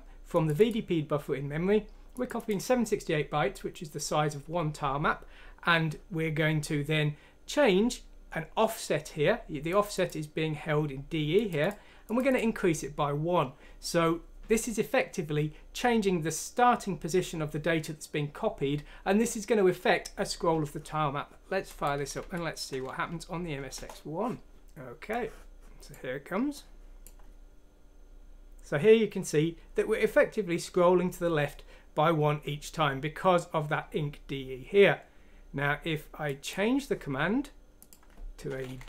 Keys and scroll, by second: 22.2 F6, 23.7 Return, 24.6 F6, 24.6 Return, 38.7 Down.